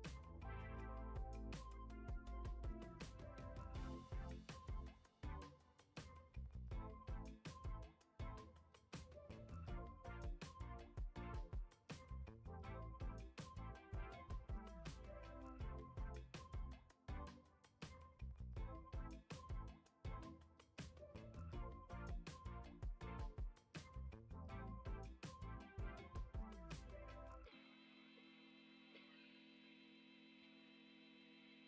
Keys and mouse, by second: 1.8 click, 2.6 click, 3.5 shift+middle click, 4.7 shift+middle click, 5.5-6.9 drag, 7.9 click, 8.7 click, 9.6-10.9 drag, 11.2 middle click, 11.9 click, 12.7 middle click, 13.5 click, 15.1 KP_1, 16.5-17.3 shift+middle drag, 20.5 ctrl+s, 22.1-22.5 shift+middle drag, 23.1 shift+a.